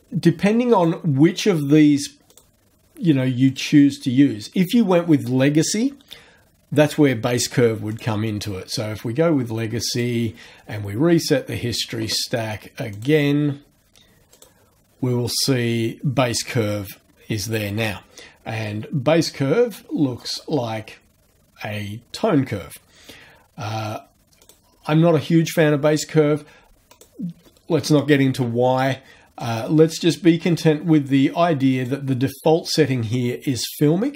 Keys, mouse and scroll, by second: 0.8 click, 2.3 click, 3.5 click, 7.9 click, 9.9 click, 13.0 click, 14.3 click, 20.3 click, 24.4 click, 26.9 click, 29.4 click, 30.5 click, 31.7 click.